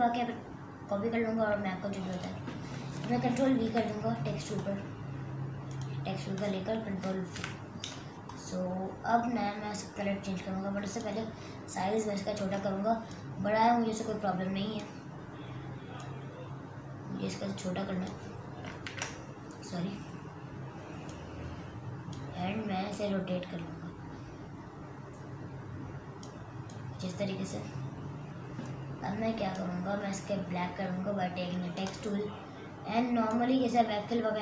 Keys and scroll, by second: 3.7 ctrl+v, 7.4 ctrl+v, 12.2 ctrl+t, 18.9 ctrl+z.